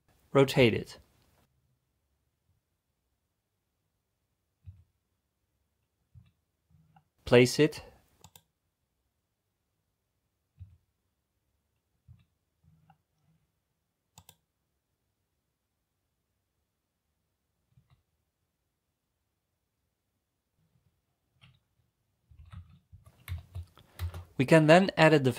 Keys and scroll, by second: 0.0-0.8 typing, 10.6 a, 12.1 c, 13.5-14.2 typing, 17.8 r.